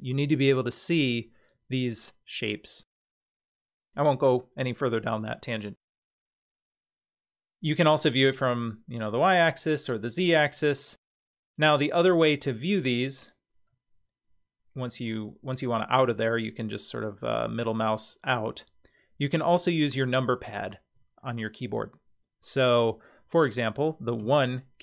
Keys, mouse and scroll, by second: 2.8 click, 8.4 click, 9.8 click, 13.7-14.9 middle drag, 16.8-18.4 middle drag, 24.2 KP_1.